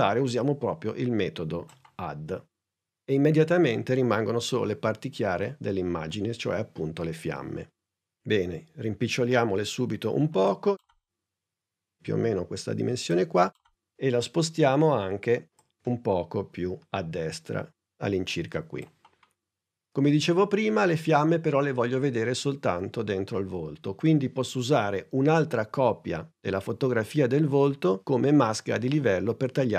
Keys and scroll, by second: 9.4 s, 15.2 p.